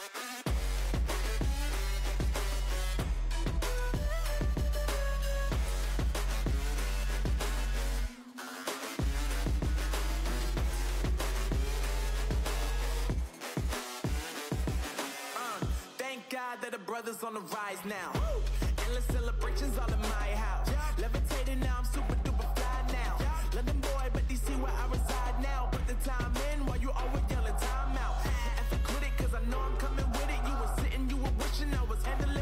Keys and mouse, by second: 1.6 ctrl+2, 4.7 Tab, 6.0 ctrl+r, 8.5 ctrl+r, 11.8 Tab, 14.6 Tab, 15.8 ctrl+r, 18.4 z, 19.5 c, 21.2 z, 23.0 ctrl+e, 31.6 right click, 31.9 z.